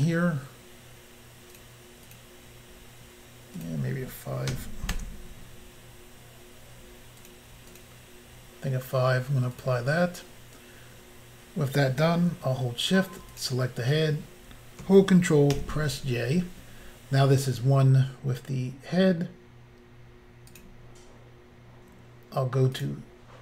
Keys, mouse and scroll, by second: 1.5 click, 1.6 click, 2.1 click, 2.2 click, 3.6 click, 3.6 click, 4.5 5, 5.0 Return, 7.2 click, 7.7 click, 9.5 click, 13.4 shift+click, 15.5 ctrl+j, 20.5 click, 20.6 click, 22.8 click, 22.8 click.